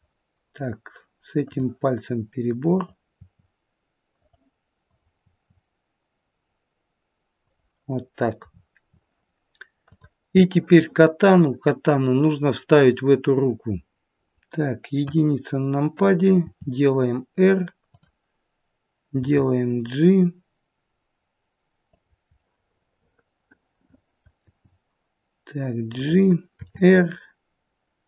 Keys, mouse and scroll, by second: 1.5 click, 2.6 click, 3.3 r, 4.9 click, 5.4 r, 8.4-9.8 scroll down 5, 9.8 click, 9.8-10.4 scroll down 2, 10.4 middle click, 12.0-12.9 scroll down 1, 15.0 KP_1, 16.5 r, 19.2 g, 22.4 middle click, 24.5 g, 26.5 r.